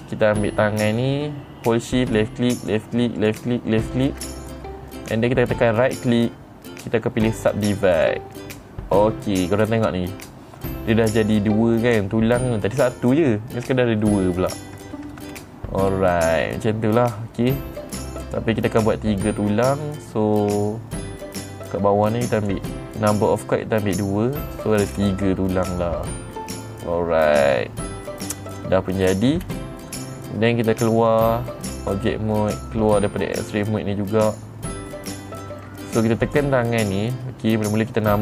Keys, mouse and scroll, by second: 0.5 click, 2.6 shift+click, 3.1 click, 3.7 click, 4.4 click, 6.4 right click, 8.5 click, 10.1 middle click, 10.1-10.6 scroll up 4, 15.8-17.8 middle drag, 15.8-16.4 scroll down 2, 16.4-17.5 scroll down 1, 17.5 scroll down 1, 18.8 click, 22.9 click, 25.4 middle click, 25.4-28.6 scroll up 5, 29.0 click, 29.5 middle click, 29.5-30.1 scroll down 7, 29.9 middle click, 31.6 click, 32.3 click, 33.9 click, 34.8 middle click, 35.7 middle click, 36.8 click, 37.3 middle click, 37.3-38.2 scroll down 2.